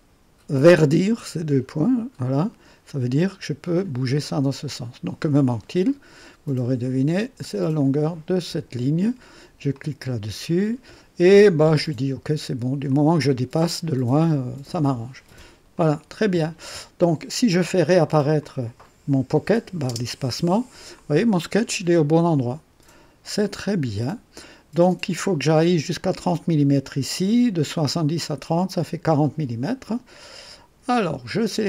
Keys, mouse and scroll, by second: 2.1-5.6 drag, 5.8 click, 7.7 click, 9.7 click, 12.9 click, 15.7 click, 18.4 click, 19.9 space, 21.0-23.2 drag, 23.4 click, 29.6-31.0 drag.